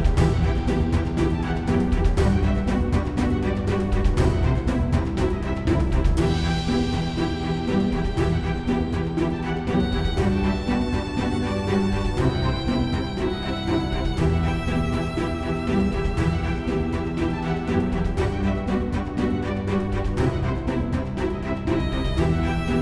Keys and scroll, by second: 8.3 F9.